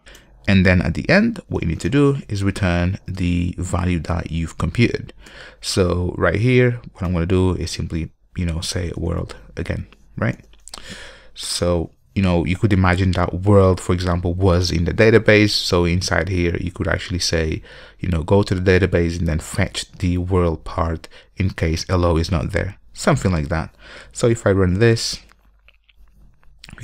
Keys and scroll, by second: 25.0 ctrl+F5.